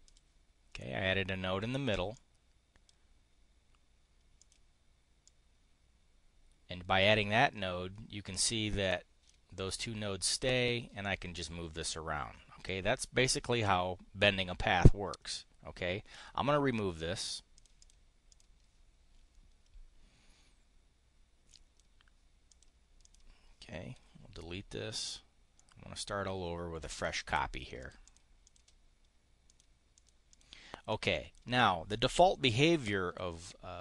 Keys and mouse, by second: 0.0 click, 2.1 click, 4.3 click, 5.2 click, 10.9 click, 16.0 click, 17.5 click, 17.7 click, 18.1 click, 21.4 click, 22.4 click, 22.9 click, 23.9 Delete, 24.8 click, 25.4-27.0 drag, 27.7 click, 28.3 click, 29.5 click, 29.9 click, 30.2 click, 30.8 click.